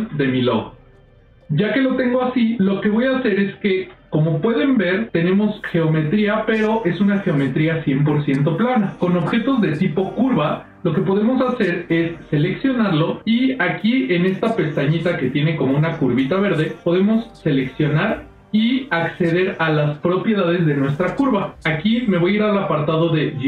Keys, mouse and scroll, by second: 2.1 middle click, 3.2 ctrl+middle click, 8.8 click, 11.1 click, 12.1 click, 17.4-21.9 drag, 23.1 click.